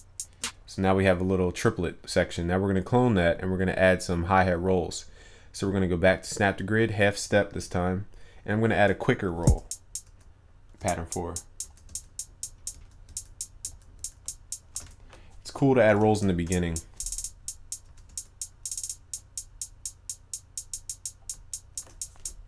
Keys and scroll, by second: 15.9 ctrl+u.